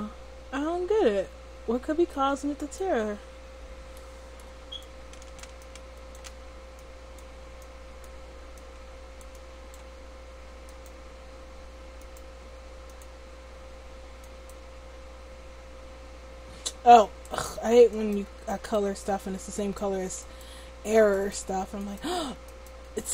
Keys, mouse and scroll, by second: 2.6-4.8 right drag, 3.3-4.8 middle drag, 3.9 click.